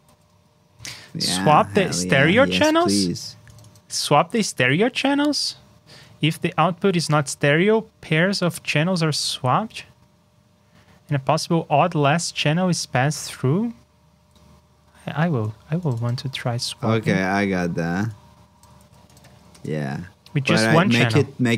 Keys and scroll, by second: 0.0 super+c, 0.2 super+Tab, 0.9 shift+super+Tab, 4.2 super+c, 4.5 super+Tab, 14.2 super+Tab, 16.6 super+v, 18.8 super+c, 19.2 super+v.